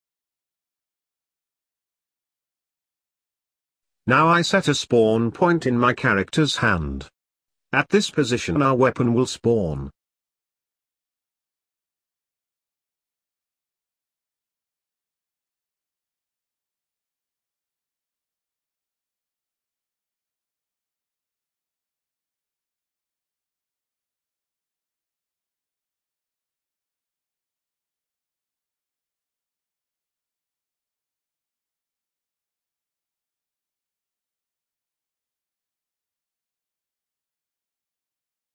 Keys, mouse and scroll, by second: 0.6 click, 1.2 click, 1.9-2.6 scroll up 3, 2.6-3.2 shift+middle drag, 3.2-3.7 scroll up 6, 3.7-7.2 middle drag, 7.2 shift+right click, 8.6 shift+right click, 9.2 shift+right click, 10.9-17.4 middle drag, 18.2 middle click, 18.5-19.0 scroll down 4, 19.0-21.3 middle drag, 21.3 KP_Decimal, 22.2 scroll up 1, 22.4-24.1 middle drag, 24.1-24.6 scroll up 3, 25.5 click, 26.6-28.5 drag, 28.5-30.6 middle drag, 30.7-34.8 drag, 34.8-38.0 middle drag, 38.2-38.5 scroll down 3.